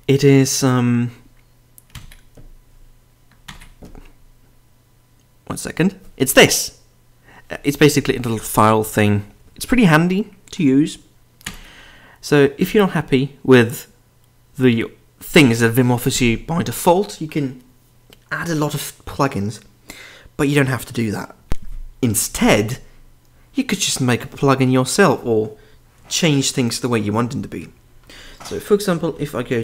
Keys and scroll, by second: 1.9 ctrl+n, 3.5 ctrl+p, 11.4 ctrl+p, 12.6 Escape, 21.5 ctrl+r, 28.8-29.6 typing.